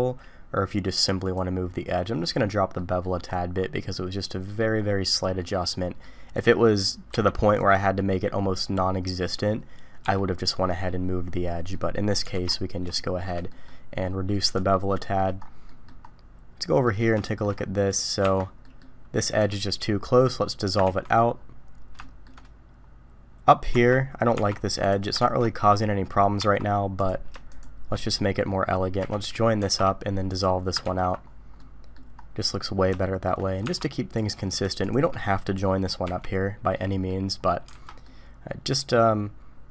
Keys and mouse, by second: 2.8 middle click, 3.9-4.6 middle drag, 5.4-6.0 middle drag, 6.6 middle click, 7.1 q, 11.7 click, 12.3 alt+a, 12.9 shift+drag, 13.5 click, 14.7-15.2 shift+drag, 15.7 drag, 16.8 middle click, 17.2 shift+drag, 17.9 middle click, 18.2 Tab, 18.6 middle click, 19.4 middle click, 20.9 ctrl+x, 22.0 shift+click, 23.7 Tab, 24.3 Tab, 25.2 ctrl+x, 26.4 Tab, 27.0 click, 27.5 shift+click, 29.1 j, 29.6 Tab, 30.3 click, 30.9 ctrl+x, 31.6 click, 33.0 shift+click, 33.6 Tab, 34.2 click, 34.8 shift+click, 35.2 click, 36.1 j, 36.8 click, 37.7 alt+a, 38.0-39.7 drag.